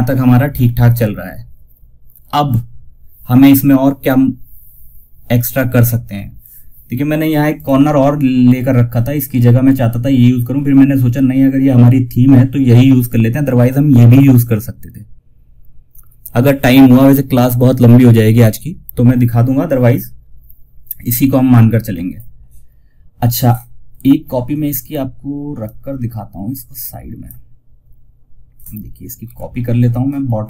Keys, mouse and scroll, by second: 6.9 click, 24.9-28.5 drag, 28.5 ctrl+c, 29.9 Page_Down.